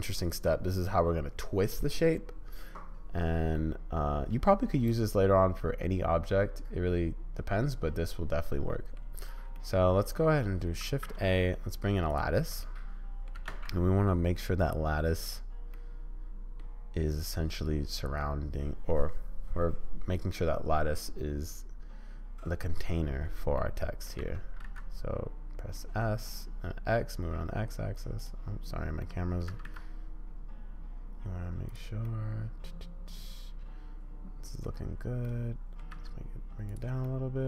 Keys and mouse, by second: 3.7-5.7 middle drag, 8.4 middle click, 8.7 middle click, 8.9 click, 8.9 middle click, 9.5-10.2 drag, 10.8 shift+a, 12.7-13.2 middle drag, 13.2 click, 13.4 g, 15.7 middle click, 16.2 click, 17.4 middle click, 23.5 middle click, 24.2 s, 29.0 middle click, 29.5 s, 32.0-34.6 middle drag, 35.2 middle click, 35.9 s, 37.0-37.4 middle drag.